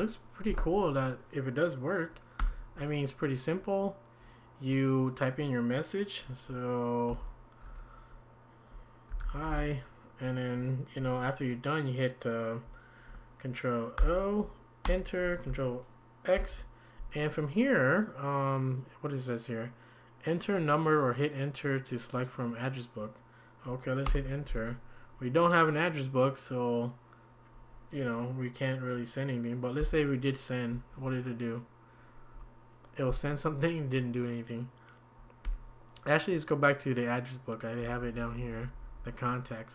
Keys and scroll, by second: 2.4 Return, 7.1 typing, 9.2-10.0 typing, 14.0 ctrl+o, 14.8 Return, 16.3 ctrl+x, 24.0 Return, 29.8 y, 35.4 Escape, 37.8 Down, 38.0 Down, 38.2 Down, 38.4 Down, 38.6 Down, 38.8 Down, 39.0 Down.